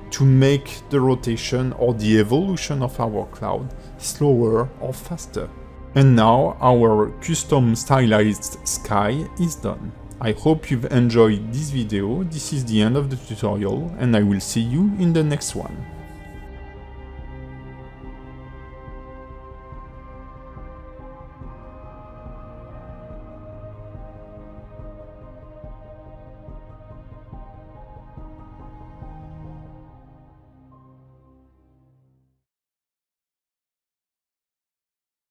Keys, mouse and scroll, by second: 0.4 alt+middle click, 10.7 ctrl+space, 14.7 click.